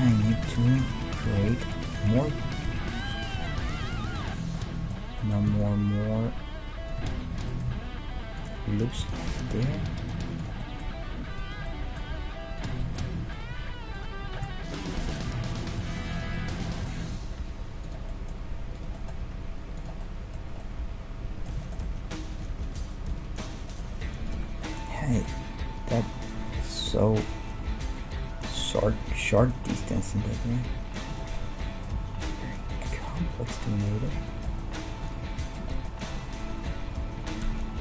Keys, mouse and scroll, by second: 1.5 e, 2.6 s, 4.5-5.6 middle drag, 5.6-7.4 drag, 6.5 middle click, 7.6-9.2 middle drag, 7.7 g, 8.8 right click, 9.0 g, 9.9 g, 12.1 g, 13.1-14.5 middle drag, 14.5 right click, 15.1-16.3 middle drag, 15.3 g, 17.4 g, 19.2 g, 20.5-22.3 middle drag, 26.0-28.9 middle drag, 29.2-32.3 middle drag, 30.2 g, 32.3-34.0 drag, 33.2 g, 35.1-36.8 drag.